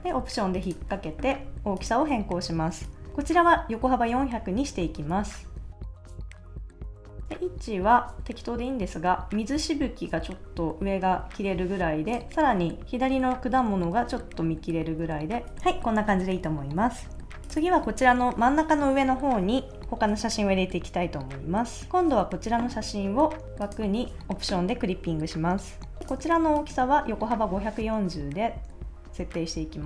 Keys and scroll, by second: 6.4 shift+Return, 13.7 Left, 14.9 Right, 15.4 Left.